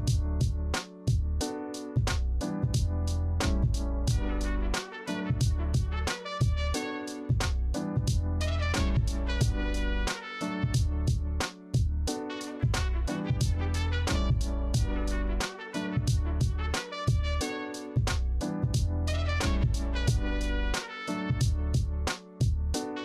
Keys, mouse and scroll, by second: 10.1 ctrl+g, 10.8 ctrl+z, 22.6 ctrl+z.